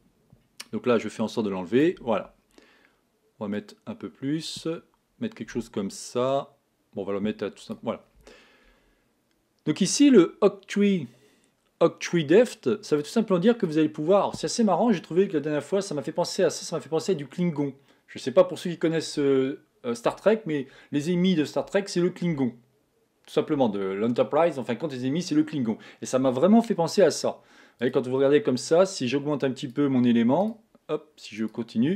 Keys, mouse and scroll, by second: 3.9 click, 13.3 click, 15.0 scroll down 2, 16.1-16.8 scroll up 4, 16.8-17.2 scroll down 2, 28.5 click, 31.8 click.